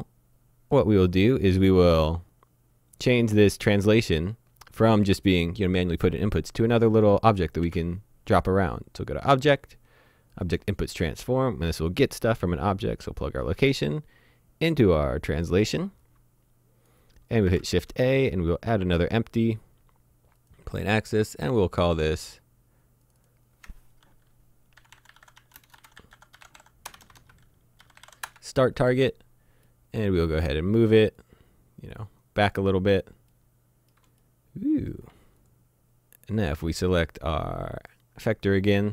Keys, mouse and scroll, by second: 7.3 click, 7.6 shift+a, 10.4 click, 17.5 shift+a, 20.4 click, 22.0 click, 24.8-28.0 typing, 28.2 Return, 29.3-29.7 scroll down 1, 29.7 middle click, 31.2 click, 32.9-33.3 scroll down 1, 33.3 middle click, 35.4 click, 37.8 click.